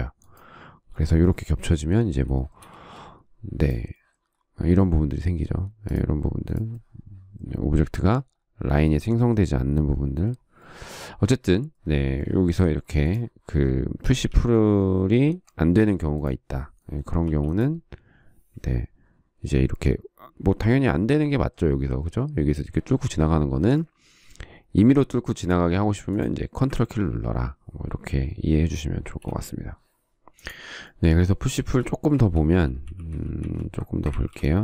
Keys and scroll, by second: 3.1 space, 14.7 ctrl+z, 17.6 p, 29.2 space, 29.5 Escape, 32.9 ctrl+z.